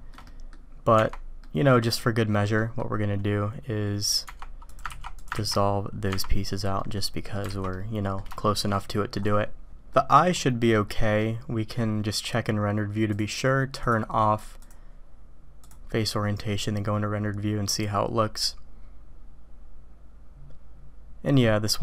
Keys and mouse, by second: 0.2 drag, 0.2 right drag, 1.4 click, 2.6 click, 4.9 ctrl+x, 5.1 click, 5.5 ctrl+x, 6.1 Tab, 6.8-7.3 drag, 7.5 alt+a, 7.7-8.2 drag, 8.4 shift+drag, 8.7-9.2 drag, 9.9 click, 10.8 click, 13.1-14.7 drag.